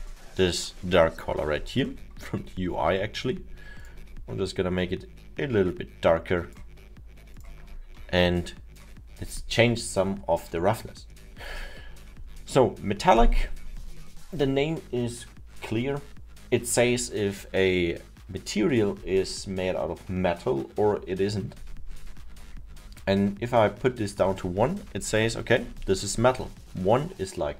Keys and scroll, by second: 1.4 alt+7.